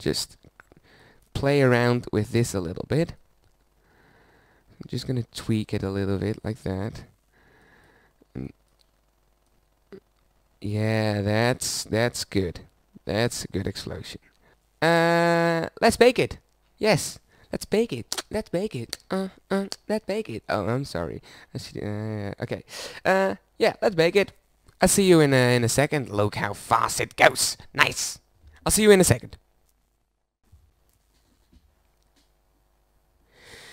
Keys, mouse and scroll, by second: 14.5-17.8 middle drag, 27.4-29.9 drag.